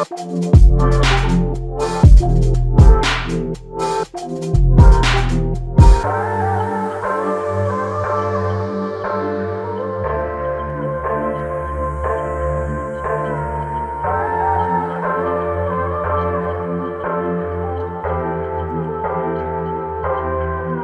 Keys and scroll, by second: 0.3 typing, 1.7-2.7 typing, 4.0 typing, 10.9 typing.